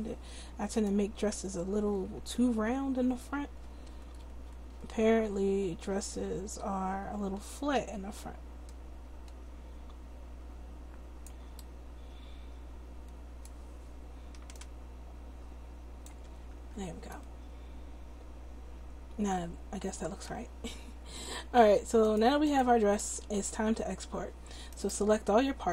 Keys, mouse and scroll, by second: 1.8-2.6 scroll up 1, 2.6-3.3 scroll up 1, 14.6-16.2 drag, 16.6 Tab, 22.6 click, 23.0 middle click, 24.7-25.7 middle drag.